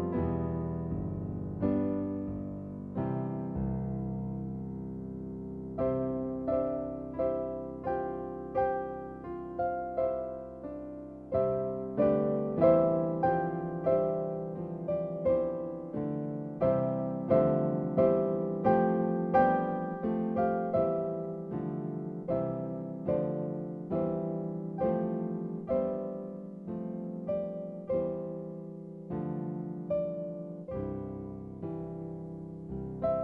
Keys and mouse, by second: 4.5 click, 8.4 click, 9.6-11.3 click, 11.2 click, 12.6 l, 15.2 click, 16.2 click, 17.5 click, 18.3 click, 21.5 click, 25.4 click, 26.4 click, 32.0 click, 32.4 click.